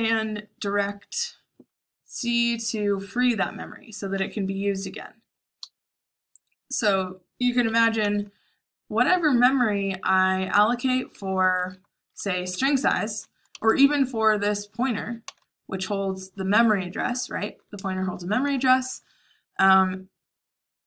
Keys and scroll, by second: 7.6 Escape, 7.9-9.8 typing, 12.1-15.8 typing, 17.7-19.3 typing.